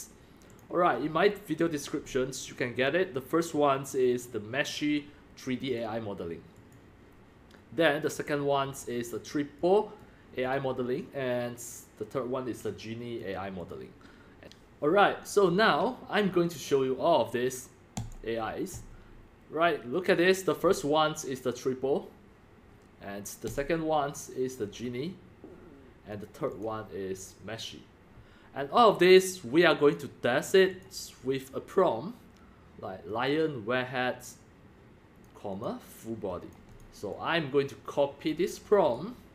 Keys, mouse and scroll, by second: 1.6 click, 2.1-2.5 drag, 3.5 click, 4.4 scroll, 6.7-7.1 scroll down 2, 10.6 click, 13.2 click, 14.0 drag, 14.4 click, 18.5 drag, 18.9 click, 23.4 click, 23.6-24.8 drag, 26.6-27.2 drag, 27.2 drag, 28.9 click, 29.8 click, 30.7 click, 33.1-34.3 drag, 35.2 click, 35.6 click, 36.5-38.3 drag, 38.8 right click.